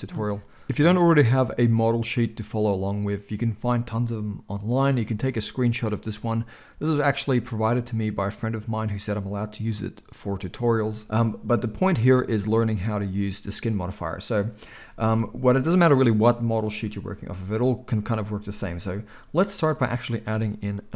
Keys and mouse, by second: 0.1 alt+a.